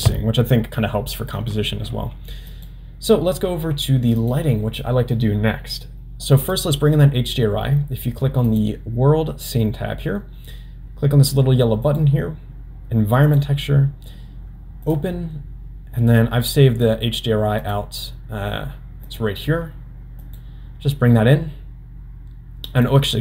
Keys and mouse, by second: 2.6-4.9 drag, 6.4 click, 8.5 click, 12.0-13.5 drag, 22.8 click.